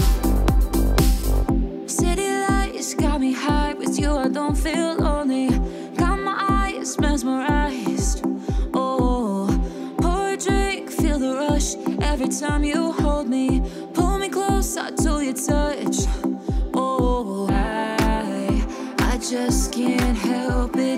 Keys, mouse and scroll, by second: 0.8 click, 1.8 scroll up 1, 3.0 click, 10.5-12.6 typing, 15.9 click.